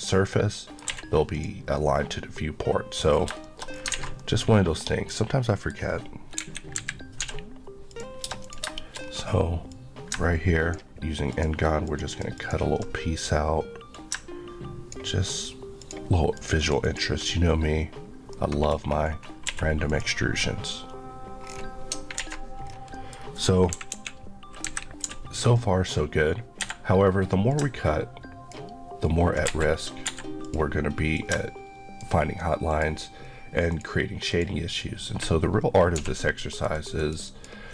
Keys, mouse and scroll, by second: 0.9 q, 1.4 click, 2.0 middle click, 3.1-3.9 scroll down 4, 3.5 shift+middle click, 3.9 alt+a, 4.2 middle click, 5.2 scroll down 1, 5.4 middle click, 5.8-6.4 scroll up 1, 6.4 KP_1, 6.8 KP_3, 7.2 d, 7.9 click, 8.4 click, 8.8 shift+middle click, 9.0-9.7 scroll up 1, 10.1 click, 11.3 ctrl+click, 12.1 ctrl+Left, 16.4 click, 16.4 click, 18.3 middle click, 18.7 scroll up 1, 19.5 q, 19.9 click, 21.5 scroll down 1, 22.2 alt+a, 22.7-23.2 scroll down 2, 22.9 middle click, 23.8 KP_2, 23.9 KP_1, 24.6 KP_3, 25.0 d, 26.6 Escape, 27.5 click, 29.5 click, 30.4 click, 36.0 ctrl+x, 36.5 ctrl+click.